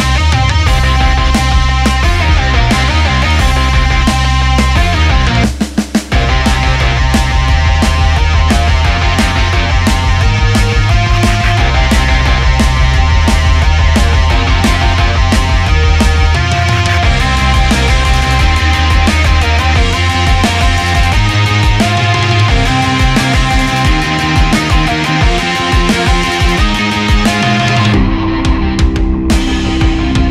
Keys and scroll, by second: 3.3 Delete, 3.4 Escape, 6.9 Delete, 8.6 Escape, 8.8 Tab, 9.3 ctrl+s, 11.1 Up, 11.3 Up, 11.5 Up, 14.1 ctrl+s, 15.1 Left, 15.3 Escape, 17.5 ctrl+z, 18.1 ctrl+z, 19.5 ctrl+c, 20.7 Down, 20.9 Up, 25.7 Up, 26.0 Tab, 26.1 ctrl+v, 26.9 Escape, 27.6 ctrl+s, 28.5 ctrl+z.